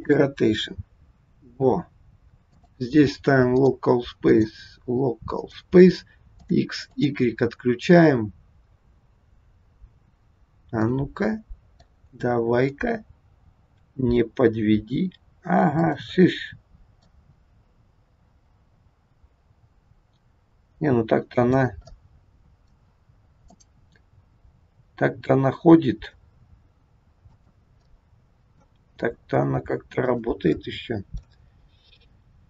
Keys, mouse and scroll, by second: 2.6 click, 4.2 click, 6.3 click, 6.9 click, 10.4-10.8 scroll down 2, 10.8 middle click, 12.7 click, 13.7 g, 16.2 middle click, 17.2 g, 21.8 middle click, 23.6 click, 24.1 g, 27.8 middle click, 28.7 g, 30.5 middle click.